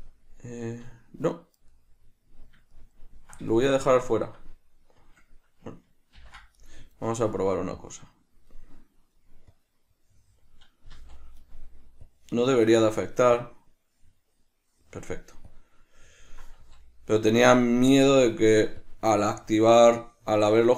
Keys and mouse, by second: 1.9-6.7 middle drag, 6.3 ctrl+j, 6.7 right click, 7.9 click, 9.6-20.1 drag, 11.0 z, 16.7 z.